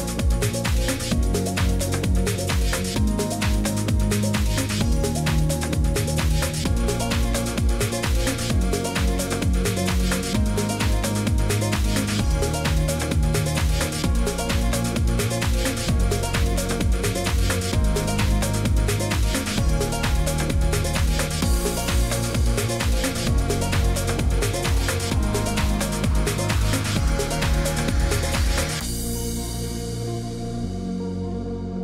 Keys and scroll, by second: 27.8 ctrl+z, 28.0 ctrl+z.